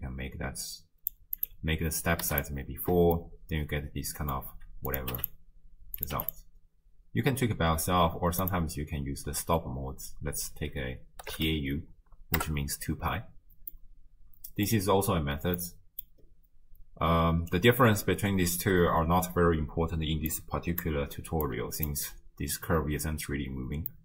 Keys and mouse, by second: 1.4-2.5 drag, 3.3-4.3 middle drag, 4.9 click, 6.0 click, 8.5-12.5 drag, 13.7-14.8 middle drag, 15.6 middle click, 20.3 click, 21.5 click, 23.9 middle click.